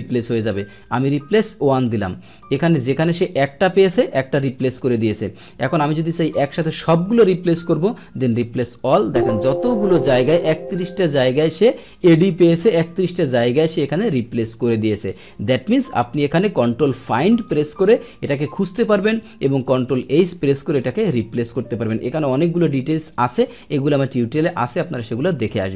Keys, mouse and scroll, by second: 1.4 click, 3.0 click, 3.3 click, 5.6 click, 8.2 click, 16.4 click, 17.5 click, 18.8 click, 19.9 click, 20.7 click.